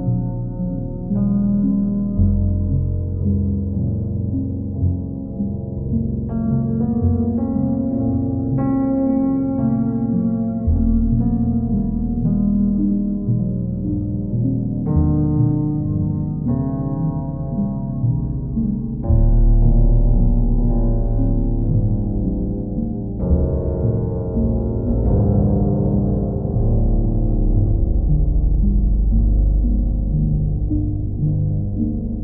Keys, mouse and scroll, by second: 1.4-3.7 drag, 4.2 alt+click, 7.9 click, 8.4 click, 9.0 shift+click, 9.8 alt+click, 15.5 click, 16.8 alt+click, 16.9 alt+click, 21.8 click, 22.8 click, 24.5-25.5 drag, 24.8 ctrl+w, 27.9 ctrl+w, 29.6-30.7 drag, 31.4-32.2 drag.